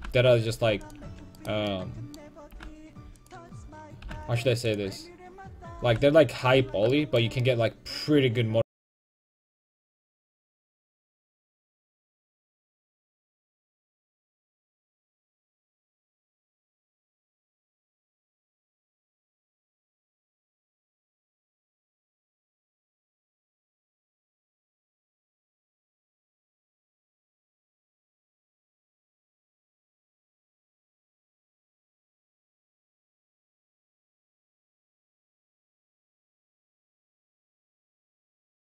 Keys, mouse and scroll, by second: 0.0 g, 1.1 a, 2.6 g, 4.1 g, 6.0 g, 6.6 a, 12.6 right click, 13.0 ctrl+x, 13.4-14.8 right drag, 15.0 a, 15.2 a, 15.5 ctrl+t, 15.7 a, 16.3-18.1 right drag, 17.4 g, 18.2-19.7 drag, 18.3 a, 20.7-21.8 right drag, 21.8-24.3 drag, 21.8 a, 21.9 g, 22.6 a, 23.3 g, 24.2-25.2 middle drag, 29.3 right click, 29.7 g, 30.8 a, 32.4 right click, 34.1 a, 37.3-38.7 right drag, 38.3 g.